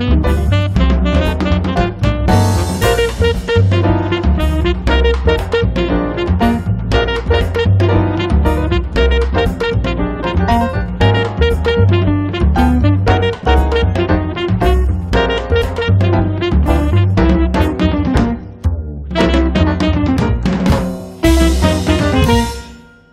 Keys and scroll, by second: 3.9 space, 6.7 r, 9.8 p, 15.2 space, 16.9 l, 20.7 f, 22.2 1, 22.5 Return.